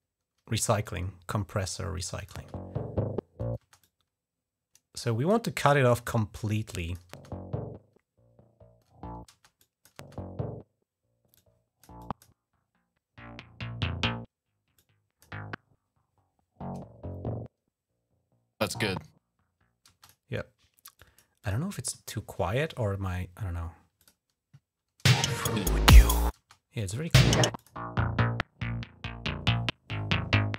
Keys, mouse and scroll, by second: 0.6-2.1 drag, 2.2 space, 3.4 space, 3.6-5.1 drag, 5.8 click, 6.5 click, 6.9 typing, 9.1-9.8 typing, 9.4 click, 11.2 click, 11.8 click, 14.6 click, 19.7 space, 19.8 click, 20.8 click, 21.2 click, 21.5 click, 23.8 click, 24.8 space, 26.2-26.9 typing, 26.6 click, 26.9 click, 27.4 click.